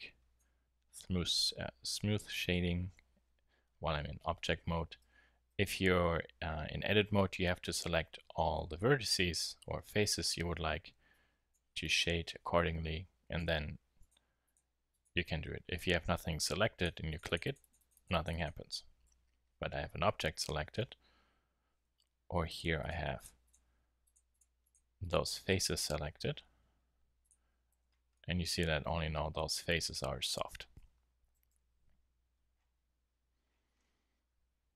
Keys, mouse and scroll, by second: 5.0 Tab, 5.5 a, 5.8 a, 15.6 a, 19.0 Tab, 21.9 Tab, 27.2-27.7 drag, 27.7 Tab, 28.2 drag, 28.4 middle click, 28.5 click, 28.6 click, 28.8 middle drag, 30.8 Tab, 31.3 a, 31.5 a.